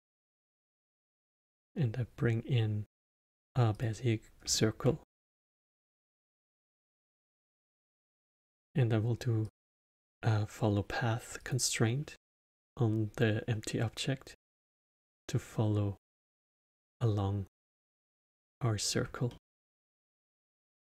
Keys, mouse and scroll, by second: 1.0 shift+a, 4.4-6.6 alt+middle drag, 6.6 click, 8.1 click, 9.4-12.5 drag, 14.6 click, 17.6-20.0 middle drag.